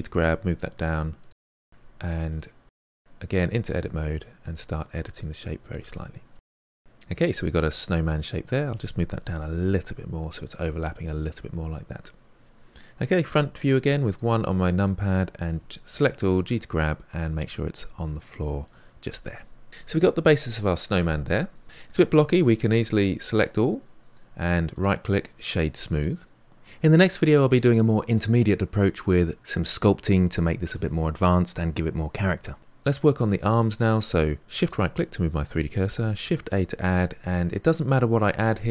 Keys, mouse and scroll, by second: 0.9 middle click, 1.6 Tab, 2.1 click, 2.6 g, 3.8 click, 3.9 g, 4.5 middle click, 5.1 click, 5.2 g, 5.8 Tab, 6.1-8.7 middle drag, 8.7 g, 10.7-12.4 middle drag, 13.2 KP_1, 14.1-15.4 drag, 15.4 g, 21.4-22.0 middle drag, 22.0-23.2 scroll up 1, 23.2-24.7 drag, 24.7-26.6 right drag, 34.5 shift+right click, 36.3 shift+a.